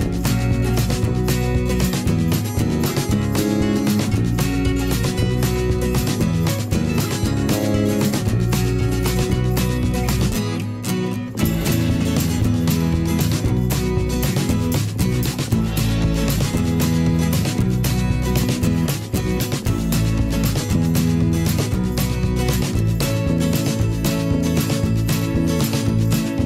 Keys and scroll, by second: 11.2 ctrl+d, 14.2 ctrl+z, 18.2 a, 19.9 v, 24.2 a.